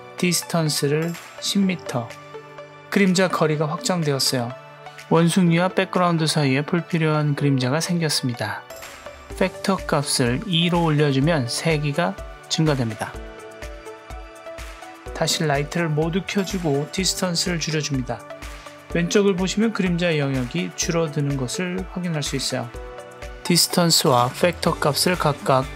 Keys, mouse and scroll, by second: 3.3-6.2 middle drag, 7.2 click, 8.7-10.3 drag, 16.9 click, 17.2 click, 17.5 click, 19.1-23.9 drag, 24.3-25.5 drag.